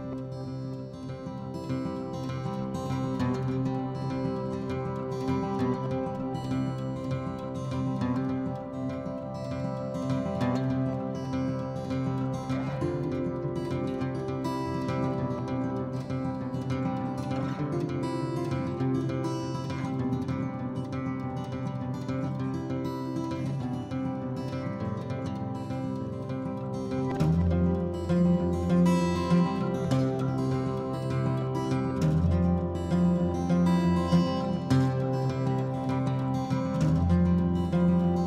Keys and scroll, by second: 1.1 4, 3.2 Return, 5.8 Escape, 6.5 Escape, 12.6 ctrl+h, 13.1-15.5 typing, 16.7 f, 17.9 p, 18.2 Escape, 25.5 Escape, 26.2 ctrl+g, 26.8 h, 27.5 b, 36.3 Escape, 36.4 Escape, 36.6 Escape.